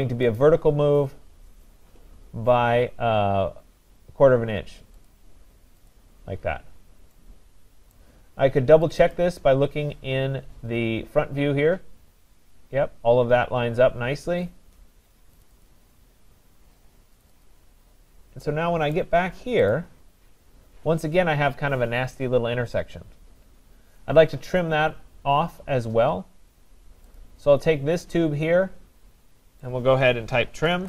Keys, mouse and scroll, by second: 0.4 click, 1.2-1.9 scroll, 5.1 click, 5.9 click, 6.4 scroll, 7.0 scroll down 5, 7.9 right click, 8.9 click, 9.1 click, 10.0-10.9 scroll down 3, 11.3 scroll down 1, 11.4 scroll up 6, 15.5 click, 15.7 click, 16.5 scroll, 17.2 click, 17.5 click, 18.1-18.5 scroll, 19.0 right click, 19.7 click, 20.2-22.4 scroll, 24.6 middle click, 27.2 click, 29.6 right click, 30.4-30.8 typing.